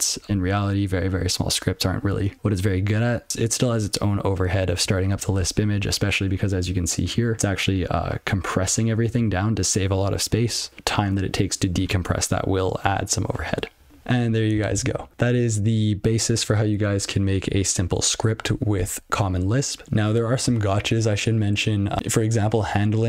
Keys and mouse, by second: 7.1 click, 10.5 click, 13.3 click.